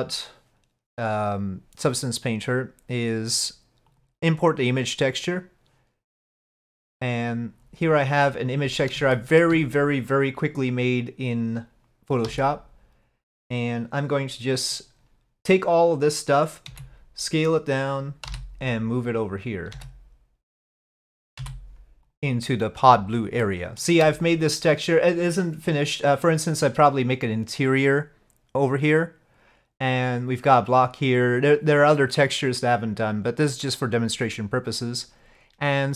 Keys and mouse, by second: 2.3-4.0 drag, 5.1 click, 9.2 shift+middle click, 12.4 a, 16.7 s, 18.3 g, 21.4 s, 23.5 shift+middle click.